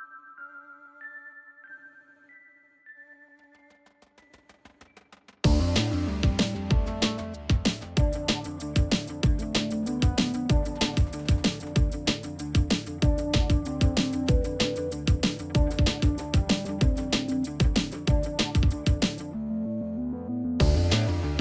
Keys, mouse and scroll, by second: 8.0 double click, 14.4 ctrl+z, 14.8 ctrl+shift+], 16.5 shift+click, 16.9 right click, 18.7 double click.